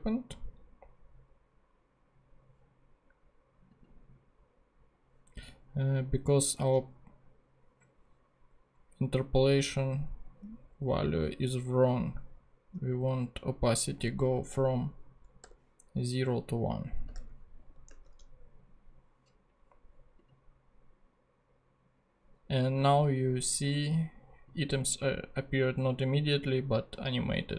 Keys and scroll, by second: 15.4 0, 17.0 i, 17.7 super+i, 17.9 super+Tab.